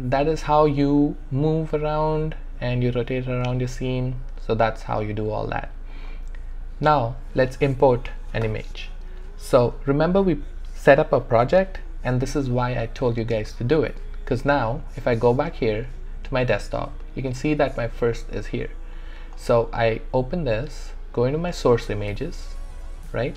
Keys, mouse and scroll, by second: 5.9 click, 14.7 click, 19.4-23.3 drag.